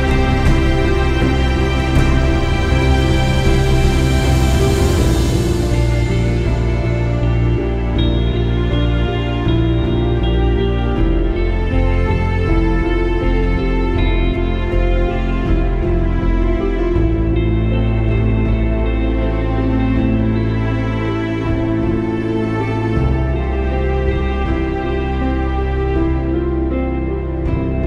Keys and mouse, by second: 0.5 click, 1.3 space, 1.4 click, 1.7 space, 3.1 click, 5.0 alt+click, 8.9 ctrl+=, 10.3 click, 11.8 ctrl+shift+], 13.7 click, 14.9 click, 15.8 click, 16.2 ctrl+-, 17.8 click, 18.1 space, 18.3 click, 18.6 space, 19.5 click, 22.4 click, 22.8 click, 23.2 click, 23.5 space, 23.6 click, 23.7 space, 23.9 click, 24.0 space, 25.2-26.6 drag, 25.2 typing.